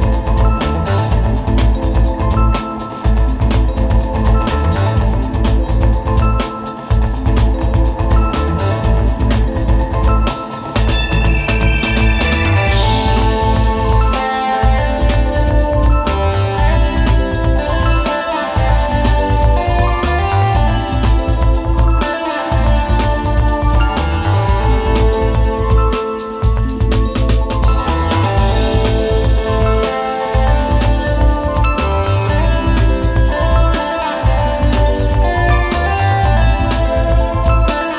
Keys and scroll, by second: 0.4 space, 0.8 space, 1.0 space, 10.6 space, 11.1 space, 13.1 space, 13.9 space, 14.4 space, 14.9 space, 17.1 space, 18.2 space, 32.7 space, 33.1 space, 34.1 space, 36.2 space.